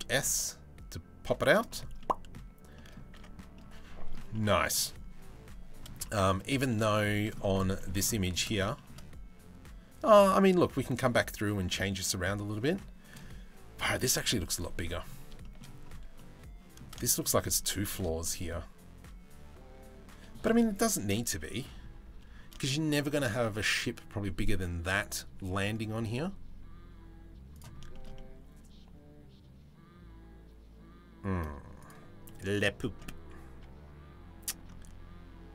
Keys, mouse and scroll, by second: 1.6 middle click, 2.4 middle click, 2.8 Tab, 3.1 middle click, 3.9 shift+middle click, 5.6 middle click, 6.5-7.2 shift+middle drag, 7.4 shift+middle click, 7.9 shift+middle click, 12.4-12.8 shift+middle drag, 15.8 middle click, 16.6 shift+middle drag, 17.8-18.9 shift+middle drag, 22.3 shift+middle click, 23.1 click, 27.5 shift+middle click, 27.8-31.0 middle drag, 31.4 click, 31.9 middle click.